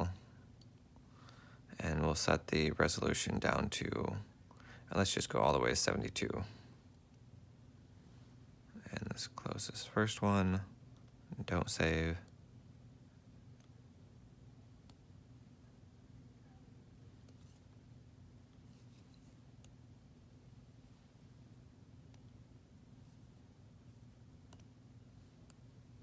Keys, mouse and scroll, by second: 12.5 double click, 14.0 ctrl+alt+click, 22.7 ctrl+z, 22.9 ctrl+z, 23.7 F4, 25.0 F4.